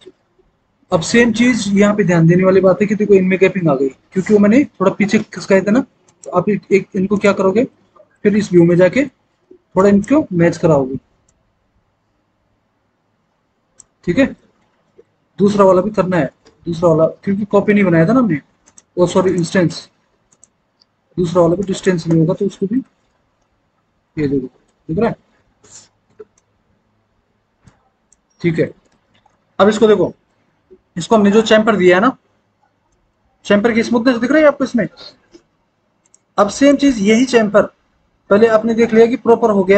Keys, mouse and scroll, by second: 7.7 alt+w, 15.8 alt+w, 16.3 alt+w, 22.1 alt+w, 22.7 alt+w, 28.3 alt+w, 28.8 alt+w, 32.1 F4.